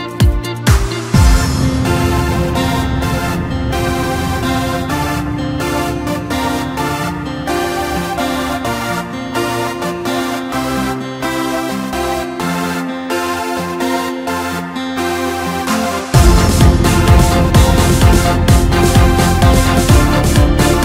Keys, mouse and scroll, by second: 2.2 click, 2.3 click, 4.6 s, 6.5 click, 7.7 s, 11.5 g, 15.8 click, 17.0-20.0 middle drag.